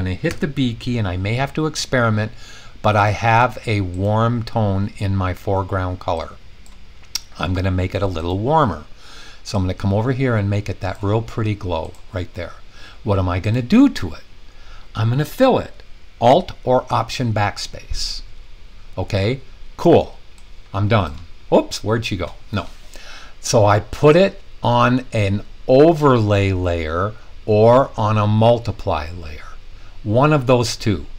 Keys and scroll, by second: 0.2 b, 16.8 alt+BackSpace.